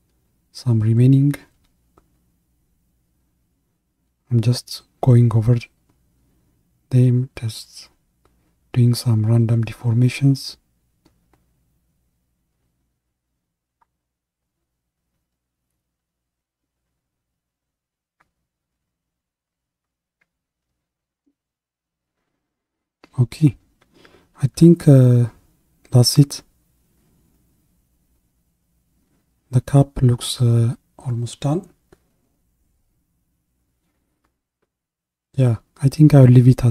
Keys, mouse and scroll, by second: 21.3-22.4 scroll down 1, 22.4-25.1 middle drag, 25.1 KP_1, 33.0 ctrl+KP_1.